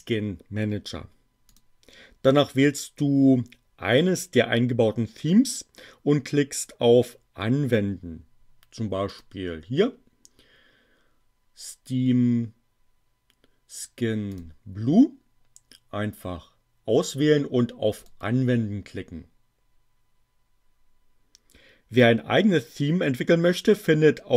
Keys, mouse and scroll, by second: 1.6 click, 9.0 click, 14.3 click, 18.0 click.